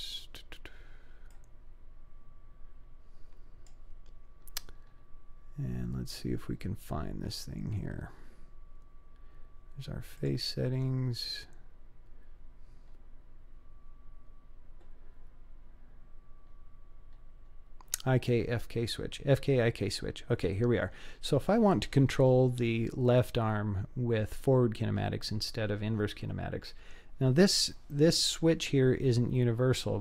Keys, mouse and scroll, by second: 1.3-3.7 drag, 4.7-5.5 scroll up 3, 5.7-6.5 scroll up 2, 6.5-7.2 scroll down 5, 9.4-9.9 scroll up 1, 10.2 click, 11.6-12.6 scroll up 2, 12.9-13.5 scroll up 1, 16.9-17.9 scroll up 2.